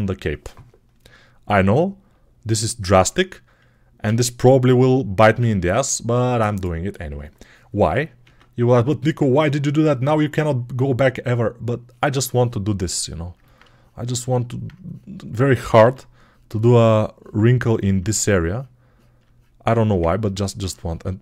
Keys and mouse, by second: 3.9 ctrl+a, 5.1 ctrl+a, 8.1 ctrl+Tab, 9.2 1, 11.6-21.2 drag, 15.7 x.